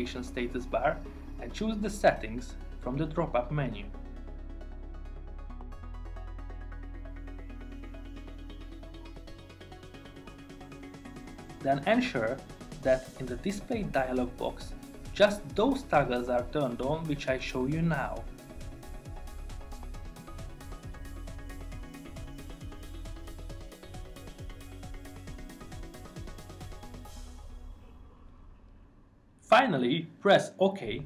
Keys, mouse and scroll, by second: 29.8 click.